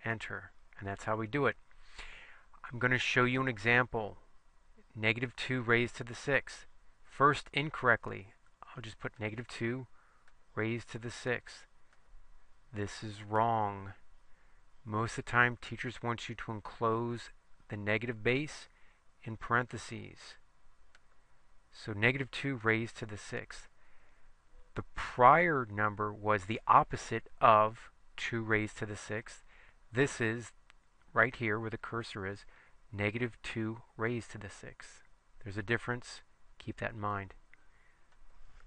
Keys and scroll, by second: 9.3 2, 10.3 ^, 11.3 6, 12.0 Return, 15.7 (, 18.4 2, 19.8 ), 21.1 ^, 22.7 6, 23.4 Return.